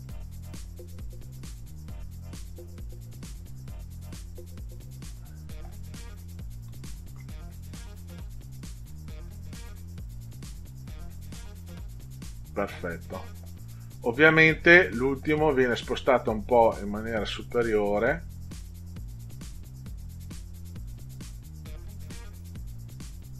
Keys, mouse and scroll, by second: 10.3 click.